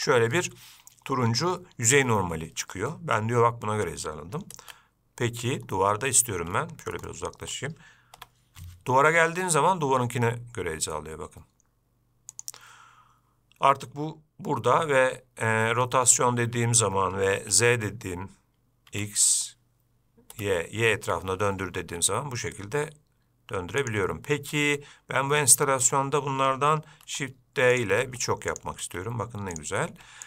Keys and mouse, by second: 7.3 shift+middle click, 8.4 g, 15.7 r, 25.7-26.1 shift+middle drag, 27.3 shift+d.